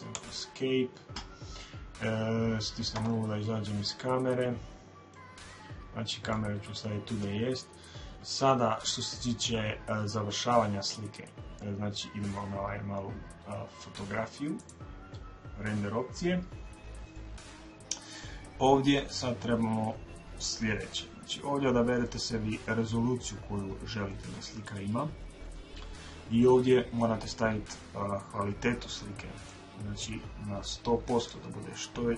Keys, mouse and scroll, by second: 0.0 Escape, 2.7 KP_0, 3.8 middle click, 3.9-4.4 scroll down 1, 4.4-5.4 middle drag, 6.2 middle click, 14.3 click, 29.2-31.1 drag.